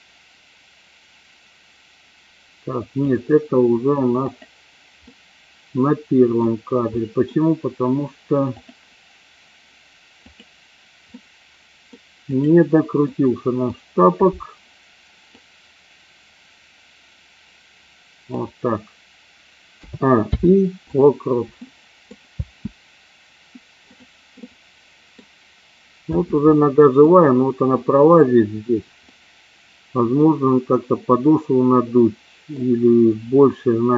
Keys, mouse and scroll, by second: 4.4 click, 5.0-6.2 middle drag, 7.0 middle click, 11.0-11.9 middle drag, 12.2-12.7 drag, 13.0-13.6 middle drag, 15.2-18.4 drag, 19.8 a, 20.1 i, 21.6 middle click, 22.2 space, 24.2-25.1 middle drag, 26.0 space, 26.4-27.0 middle drag, 29.1-30.1 middle drag, 30.6-32.5 middle drag.